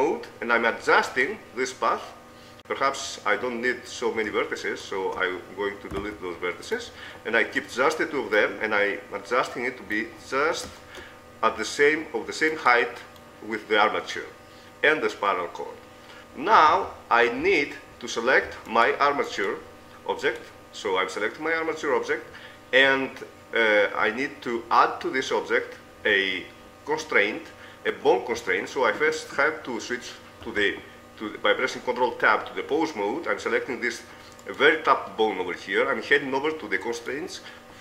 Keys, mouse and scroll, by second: 1.2-2.5 right drag, 5.0-6.4 right drag, 6.0 x, 7.6-8.6 right drag, 12.6-14.2 right drag, 13.4 click, 14.2 middle click, 15.0 middle click, 16.9 Tab, 18.9-22.1 right drag, 30.5 ctrl+Tab, 34.5-36.3 right drag, 37.1-37.8 drag.